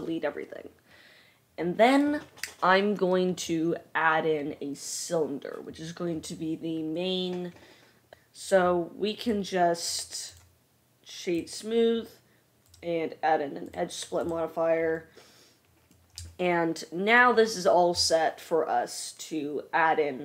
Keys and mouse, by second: 12.8-14.5 drag.